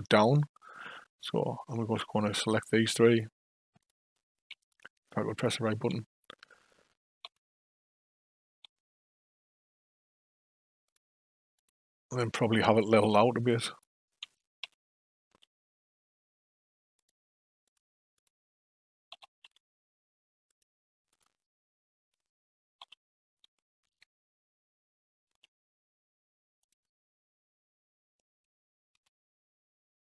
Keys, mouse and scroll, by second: 2.5 click, 3.8 click, 4.6 shift+click, 5.4 shift+click, 7.2 r, 11.5 click, 13.7 shift+click, 14.6 r, 17.6 click, 18.2 click, 19.1 r, 21.1 click, 22.8 a, 23.8 shift+d, 28.9 r.